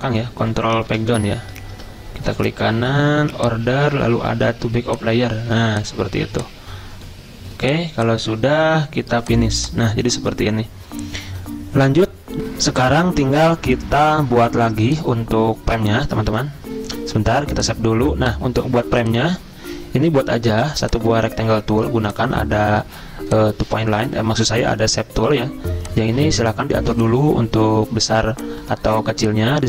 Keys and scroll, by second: 0.4 ctrl+End, 0.8 ctrl+End, 1.0 ctrl+End, 1.4 ctrl+Page_Down, 16.3 ctrl+s.